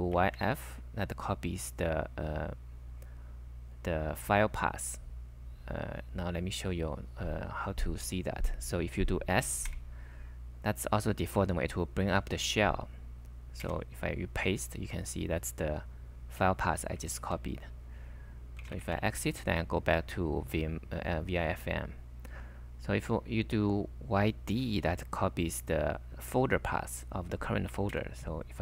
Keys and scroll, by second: 0.0-0.8 typing, 9.7 s, 13.7 super+v, 17.2 ctrl+c, 18.4-19.3 typing, 27.5-28.5 typing.